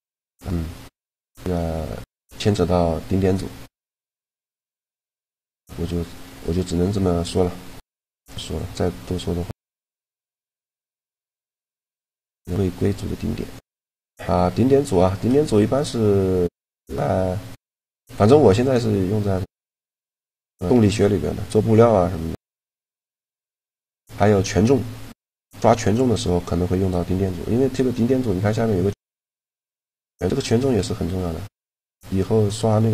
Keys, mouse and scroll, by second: 0.0 click, 0.4 a, 4.8 t, 7.6-9.3 drag, 16.1-17.5 drag, 17.5-21.3 middle drag, 22.3-28.7 middle drag, 28.7-30.6 drag.